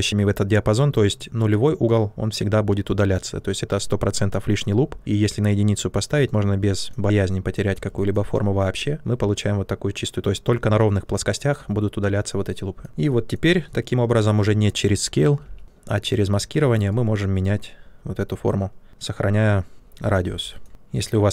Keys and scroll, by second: 15.4 r, 20.0 q.